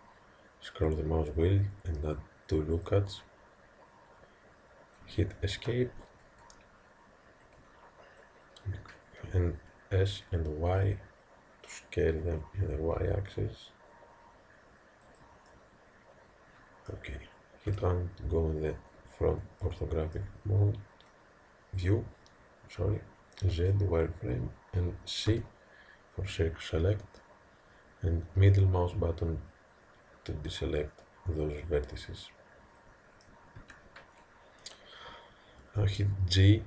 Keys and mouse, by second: 10.1 s, 15.5-17.7 middle drag, 17.7 KP_1, 19.6-23.1 middle drag, 23.5 z, 25.3 c.